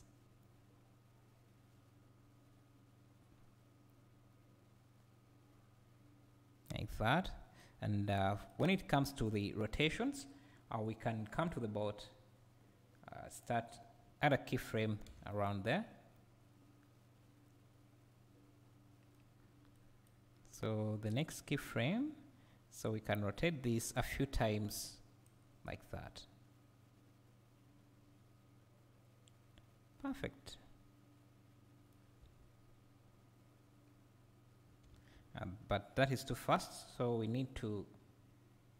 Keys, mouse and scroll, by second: 0.4-9.3 right drag, 7.9 scroll up 1, 9.3 click, 13.4-15.1 drag, 15.1 g, 16.1-21.1 right drag, 19.4-19.7 scroll down 2, 21.1-26.0 drag, 26.0-38.7 right drag, 32.2 space, 34.9 Escape.